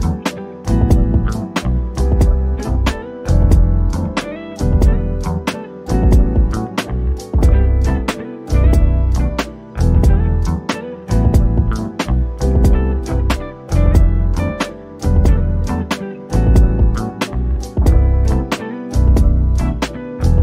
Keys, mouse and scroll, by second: 0.4 click, 1.5 o, 1.8-3.4 drag, 5.2-6.6 scroll up 1, 7.1 shift+click, 7.5 right click, 12.4 click, 17.7 ctrl+shift+g, 19.0 click, 19.9 middle click.